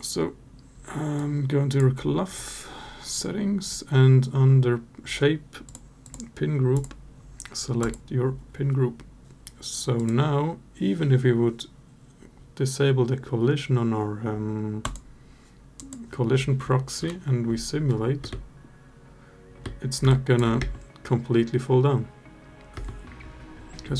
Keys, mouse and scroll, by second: 5.4 click, 6.5-7.7 drag, 9.7 click, 14.6 click, 15.5 click, 16.8 KP_Divide, 18.0 space, 19.4 space, 19.8 alt+drag, 20.3 space, 22.5 space.